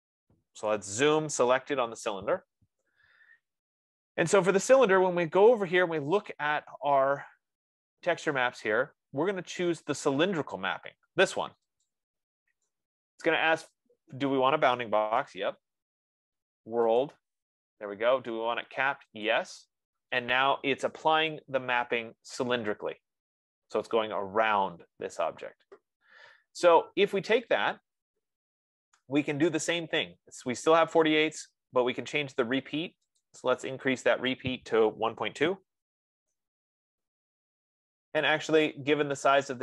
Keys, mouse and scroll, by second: 0.1-3.2 drag, 1.1-2.2 typing, 3.2-4.6 middle drag, 12.2 click, 15.7 Return, 17.6 click, 19.7 click, 29.0 F15, 33.6 click, 35.1 click, 35.7-36.8 typing.